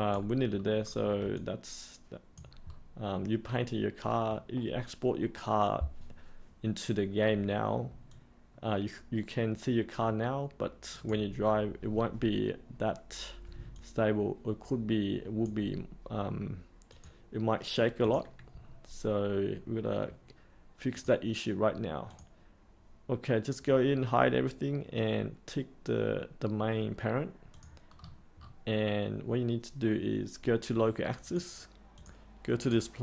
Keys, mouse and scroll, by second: 0.4-0.8 scroll up 1, 0.8-1.2 scroll down 1, 1.3 alt+click, 2.6 scroll up 1, 8.1-11.1 alt+drag, 13.7-15.4 alt+drag, 16.8 click, 20.8-21.9 drag, 27.9-28.9 scroll up 1, 31.2 click.